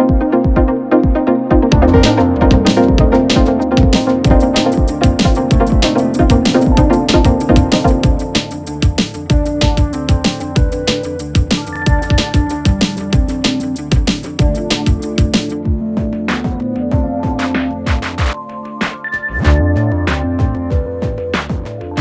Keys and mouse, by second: 1.8 click, 2.2 s, 2.8 ctrl+b, 7.8 ctrl+z, 8.2 ctrl+z, 9.1 ctrl+z, 9.5 Tab, 10.2 ctrl+a, 11.1 Tab, 11.5 2, 12.0 click, 12.3 ctrl+r, 13.5 s, 15.3 ctrl+b, 20.8 Tab.